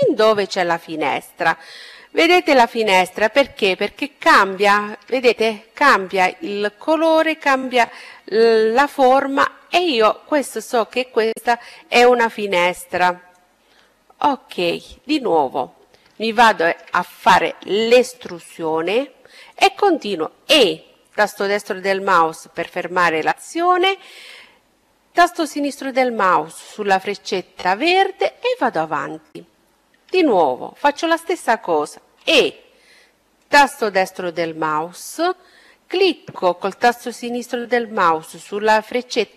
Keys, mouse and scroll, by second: 0.2-2.0 middle drag, 1.2-2.9 drag, 2.4-6.1 middle drag, 7.0 middle click, 7.5-9.5 middle drag, 10.8-12.2 middle drag, 12.2-14.0 drag, 14.3-16.7 middle drag, 17.0 e, 18.4-20.3 drag, 25.7-27.5 drag, 29.0-30.8 middle drag, 31.0 e, 35.0-36.9 drag.